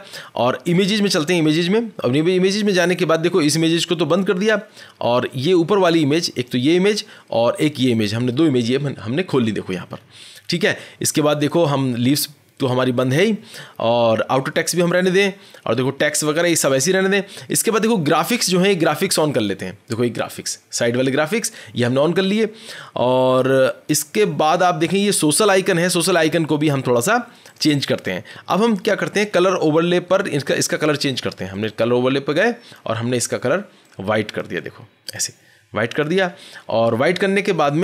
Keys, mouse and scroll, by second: 1.4 click, 2.0-2.5 scroll, 3.0 scroll, 4.1 click, 4.5-5.6 scroll, 6.4 click, 9.8-10.4 scroll, 10.4 scroll, 11.4 click, 15.0 middle click, 15.0 middle click, 15.3 middle click, 17.6 middle click, 18.6 scroll, 18.9 click, 20.5 scroll, 23.0-23.7 scroll, 23.8 scroll, 27.5 click, 27.8-29.3 scroll, 31.5 click, 31.7 click, 32.7 click, 34.3 click, 35.0 click, 35.9 click.